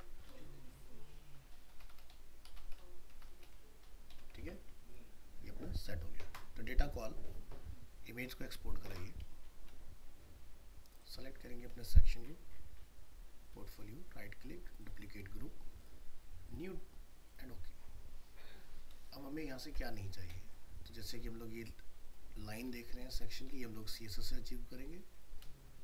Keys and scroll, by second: 4.4 ctrl+s, 18.9 ctrl+space.